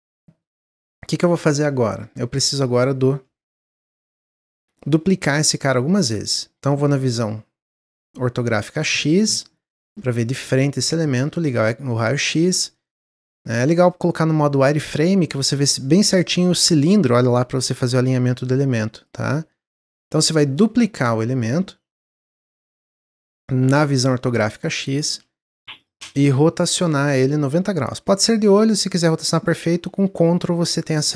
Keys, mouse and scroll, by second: 0.1 middle click, 0.4 scroll down 1, 0.7-2.0 middle drag, 2.0-2.5 scroll down 2, 2.5 click, 3.5 x, 4.2-4.6 middle drag, 4.6 click, 7.6 click, 11.0 click, 11.4-11.9 scroll up 2, 11.9 scroll up 2, 12.3-13.8 shift+middle drag, 13.8-15.6 drag, 18.4 click, 18.9 click, 20.3 scroll up 2, 20.5-20.9 middle drag, 20.9-21.5 scroll down 1, 22.3 click, 22.9-23.3 scroll up 2, 23.3-25.1 shift+middle drag, 25.1 shift+d, 26.9-28.2 drag.